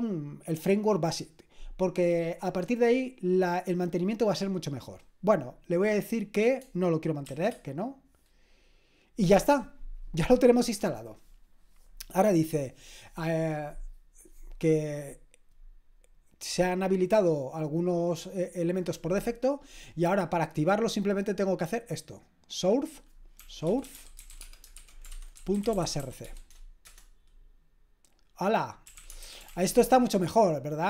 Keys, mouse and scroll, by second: 7.2 shift+n, 21.1-23.1 drag, 23.2-27.0 typing, 26.8 Return, 28.6-29.9 typing.